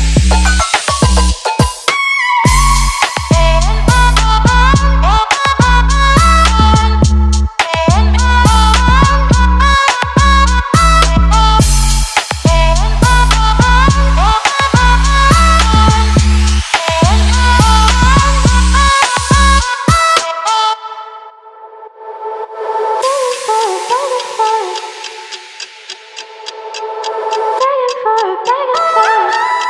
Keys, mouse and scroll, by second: 0.3 click, 1.8-4.0 alt+drag, 4.7-14.9 drag, 15.2 right click, 16.4-26.9 drag, 27.1 right click, 28.0 click, 29.6 click.